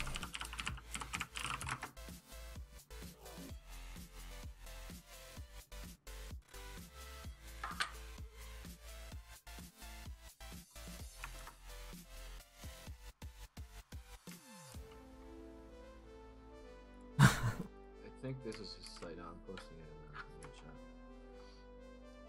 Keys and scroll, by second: 5.9 f.